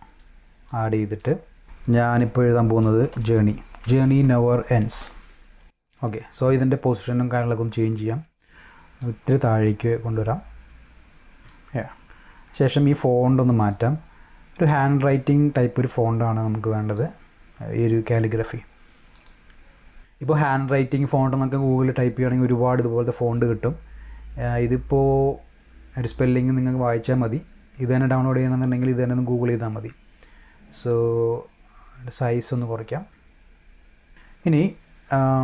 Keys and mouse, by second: 0.2 click, 1.1 click, 3.0 shift+j, 4.2 s, 9.0-11.5 drag, 13.6 click, 15.1-16.9 drag, 19.1 click, 32.6-33.9 drag.